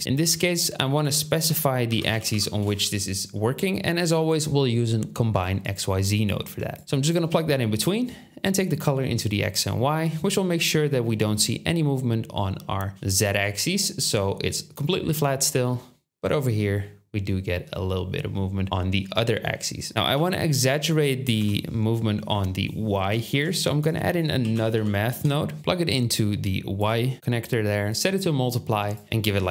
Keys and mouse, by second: 0.1 shift+a, 5.8-7.4 drag, 12.9 KP_1, 20.1 KP_7, 21.4 KP_7, 23.4 shift+a, 25.6-26.4 drag.